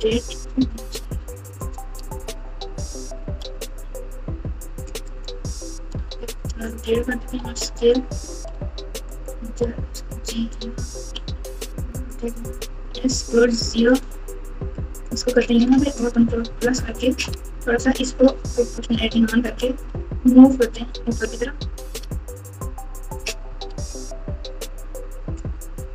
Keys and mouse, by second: 0.6 g, 2.0 e, 3.4 g, 6.0 r, 7.2 s, 8.5 e, 9.6 g, 11.1 r, 12.7 s, 16.4 ctrl+KP_Add, 18.9 o, 19.7 g, 23.7 r.